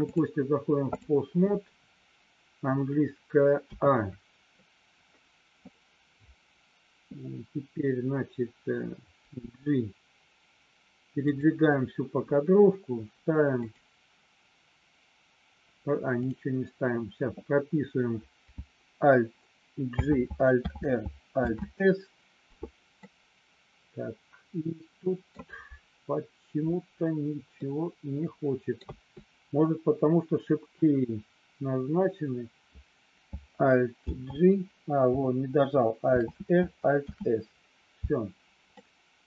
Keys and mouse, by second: 0.2 click, 3.7 a, 9.3 g, 11.2 click, 13.7-16.3 drag, 19.8 alt+j, 20.6 alt+r, 21.3 alt+s, 22.9-25.3 middle drag, 27.6-28.7 middle drag, 28.8 a, 33.9 alt+g, 36.0 alt+r, 36.9 alt+s, 38.8 middle click.